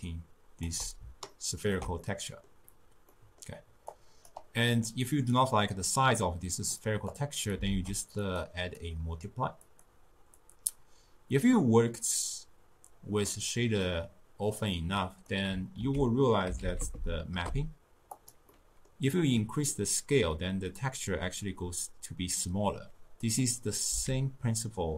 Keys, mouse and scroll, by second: 1.4-3.9 ctrl+middle drag, 3.9 click, 7.2 click, 7.7 shift+d, 8.8-13.4 drag, 14.7-15.9 drag, 15.9 ctrl+a, 16.9 p, 18.6-22.5 middle drag, 23.3 click, 23.9 x.